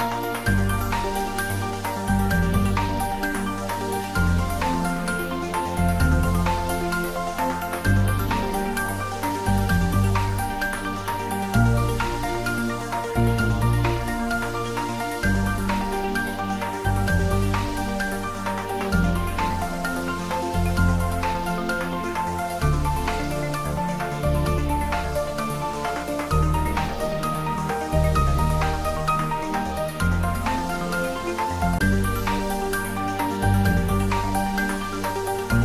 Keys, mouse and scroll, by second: 0.3 Up, 1.1 Down, 2.4 Up, 3.2 click, 3.5-4.8 scroll down 1, 5.4-7.4 middle drag, 7.4-8.5 scroll down 1, 8.5-9.1 scroll up 1, 9.4-10.2 scroll down 1, 10.3 click, 10.8 scroll up 1, 11.8-13.3 drag, 13.3-14.5 scroll up 1, 14.5 click, 15.2 alt+click, 15.3 alt+shift+click, 17.5 alt+shift+click, 20.8 alt+shift+click, 22.2 alt+shift+click, 22.8 alt+shift+click, 23.5 alt+shift+click, 24.2-28.1 middle drag, 28.1 click, 28.7-29.5 scroll down 1, 29.9 click, 31.4 shift+d, 32.4 y.